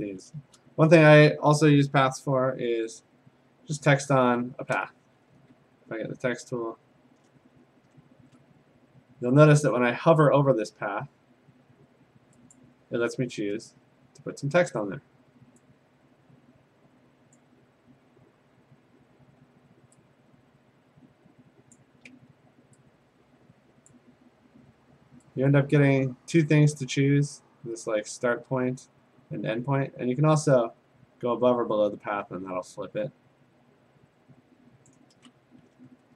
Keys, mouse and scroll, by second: 0.2 middle click, 0.3 click, 0.8 a, 2.1 p, 3.9 click, 4.3-4.8 scroll, 5.5 t, 7.4-8.4 scroll, 12.6 click, 17.3 click, 21.8 ctrl+click, 23.9 click, 34.9 ctrl+click, 35.7-36.1 scroll.